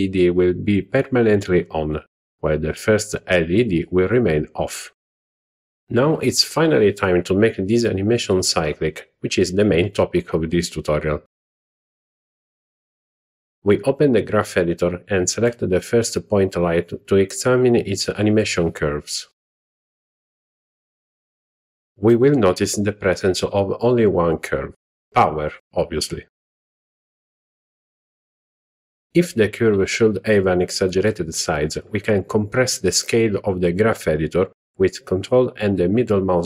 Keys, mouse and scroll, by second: 1.7-3.6 Right, 4.1 z, 7.8 click, 15.0-17.6 drag, 19.1 click, 20.2-24.6 ctrl+middle drag, 25.2 ctrl+middle click, 26.5 middle click, 28.0 click, 29.5 click, 31.2-35.4 ctrl+middle drag, 35.8-36.4 ctrl+middle drag.